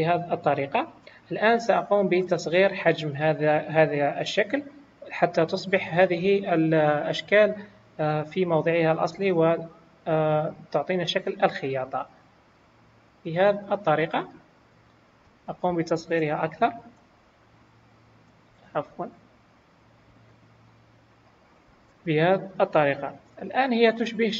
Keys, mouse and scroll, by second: 0.0 shift+click, 0.0-0.4 scroll up 2, 1.1 click, 1.1 scroll up 2, 2.4 scroll up 3, 3.4-3.8 scroll down 2, 5.3 scroll up 1, 9.1 s, 13.7-14.2 scroll down 3, 14.2 click, 14.7-15.0 scroll up 2, 15.8 click, 16.5-17.1 scroll up 1, 19.5 click, 21.5 scroll down 3, 22.0 click, 23.2 middle click.